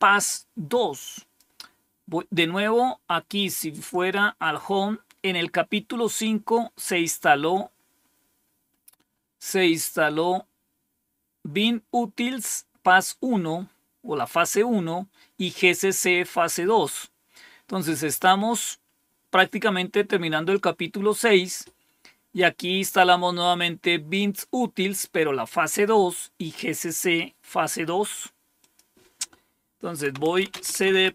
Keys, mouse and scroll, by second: 0.1-1.3 drag, 3.7 click, 5.7-6.4 scroll down 4, 7.0 scroll down 2, 7.6 scroll down 2, 8.3 scroll down 2, 9.0-10.9 scroll up 1, 10.9-12.4 scroll up 1, 12.4-14.6 scroll up 1, 14.6-15.5 scroll up 1, 15.5-16.6 scroll up 1, 16.6-17.5 scroll down 2, 28.5 click, 29.8-31.1 typing.